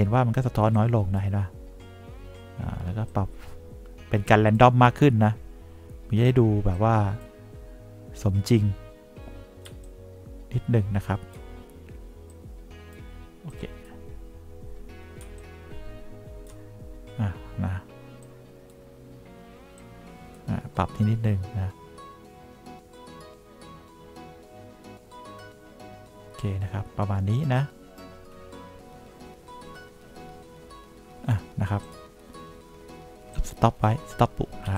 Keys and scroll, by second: 10.1 3, 15.6 3.